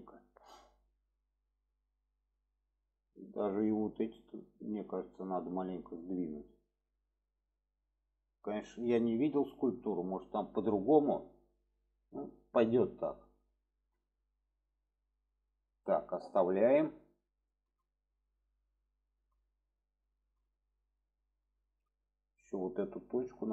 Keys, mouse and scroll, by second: 0.4-2.4 middle drag, 2.6-3.3 middle drag, 4.1-5.3 drag, 5.5-6.1 middle drag, 6.8 click, 9.3 click, 9.9-15.8 middle drag, 16.5 shift+middle click, 17.5 shift+middle click, 18.9 shift+middle drag, 20.0 shift+middle click, 21.5 alt+z, 22.5 click.